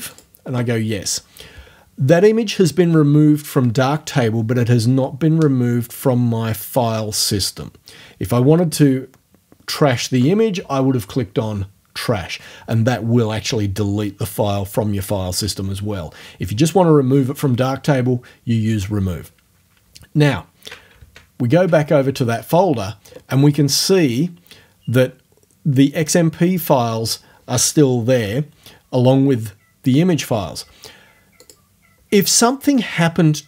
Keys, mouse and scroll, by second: 0.1 click, 21.0 alt+Tab, 31.4-33.4 drag.